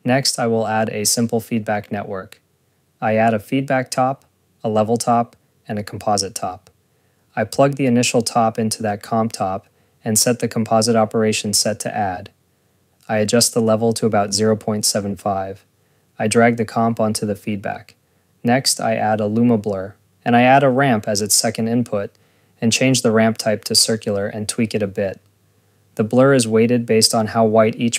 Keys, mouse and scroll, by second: 1.0 Tab, 1.2-2.7 typing, 3.6 click, 4.0 click, 5.0 click, 5.2-5.9 typing, 6.1 click, 6.3 click, 7.0 Tab, 7.4 click, 8.7 click, 9.3 click, 10.1 click, 12.4 click, 12.9 ctrl+s, 13.4 click, 16.0 click, 19.0 scroll, 19.1-19.9 typing, 19.8 click, 20.5 click, 20.7 click, 21.3 Tab, 21.9 Return, 22.3 click, 23.1 scroll.